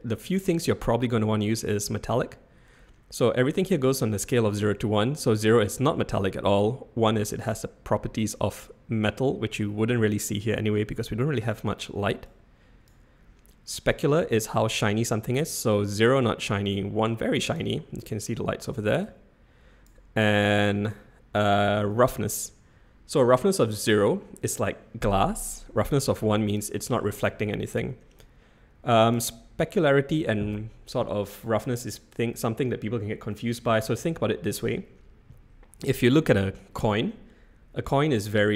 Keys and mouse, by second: 5.1-7.4 drag, 8.0-9.0 middle drag, 10.5-11.4 middle drag, 12.3 click, 15.4-17.6 drag, 19.1 click, 23.4-26.5 drag, 28.2-29.2 drag.